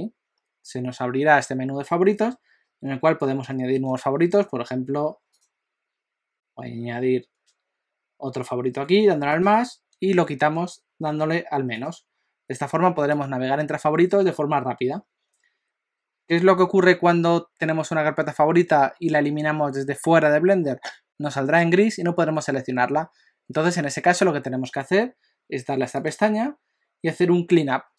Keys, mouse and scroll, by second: 5.4 click, 6.3 click, 9.3 click, 11.8 click, 13.1 click, 26.0 click.